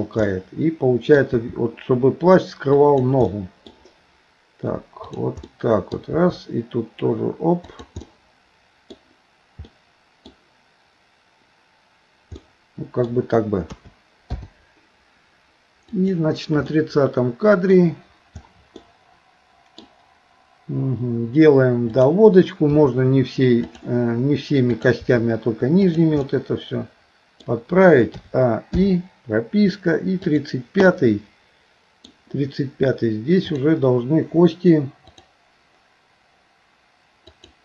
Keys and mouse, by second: 0.3 middle click, 1.3 r, 3.3 middle click, 5.0 click, 5.5 middle click, 6.2 r, 8.0 middle click, 9.7 middle click, 12.4 middle click, 13.8 a, 14.4 i, 16.0 click, 16.8 middle click, 18.9 middle click, 21.9 click, 22.8 r, 25.0 r, 26.3-27.5 middle drag, 28.2 a, 28.8 i, 30.3 click, 30.9-32.1 middle drag, 33.5 click, 35.2 click, 37.4 click.